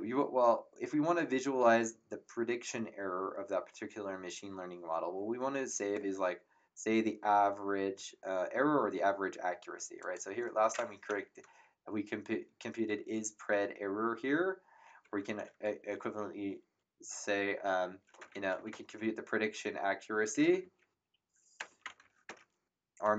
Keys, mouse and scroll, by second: 10.0 click, 15.0 Return, 15.0 KP_Enter, 17.9-23.1 typing.